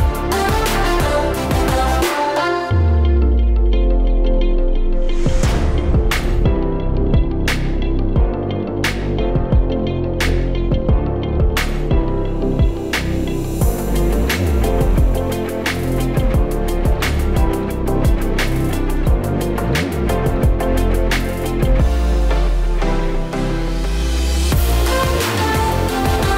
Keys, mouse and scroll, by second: 0.3 scroll down 1, 0.9 click, 2.8 click, 4.1 scroll up 1, 4.9 middle click, 5.4 click, 6.3 click, 8.0 click, 8.7 click, 9.1 click, 10.1 shift+a, 15.5-16.0 scroll down 3, 15.8 middle click, 16.7 click, 19.7 middle click, 20.4 click, 21.8 click, 22.5 KP_0, 23.7 s, 24.5 click, 26.0 click.